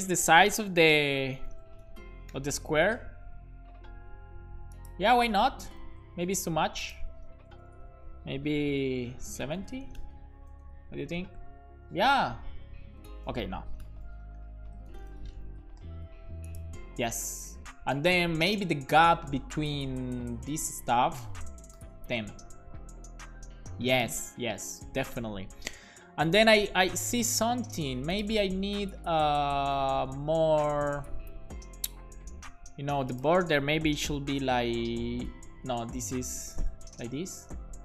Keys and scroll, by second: 0.8 BackSpace, 1.3 8, 1.5 BackSpace, 7.7 Left, 7.9 Left, 8.6 BackSpace, 9.4 7, 10.0 BackSpace, 10.5 super+s, 13.9 BackSpace, 14.4 6, 14.7 5, 14.9 BackSpace, 15.5 super+s, 21.7 BackSpace, 21.8 1, 22.0 super+s, 34.3 BackSpace, 36.4 BackSpace, 36.7 super+s.